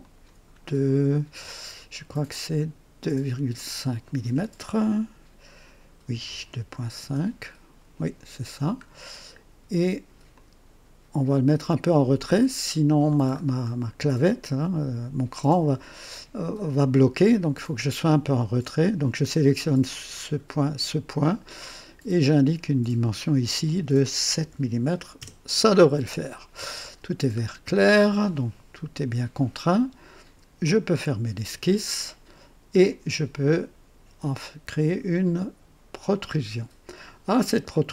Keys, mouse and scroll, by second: 0.0 click, 3.5 click, 6.0-6.9 typing, 8.5-8.8 scroll down 1, 10.2-13.1 drag, 13.3 scroll up 1, 18.2 click, 20.6 click, 22.5 click, 24.3 KP_7, 25.1 Return, 27.3-27.9 scroll down 3, 28.3-29.2 right drag, 30.6 click, 36.0 click.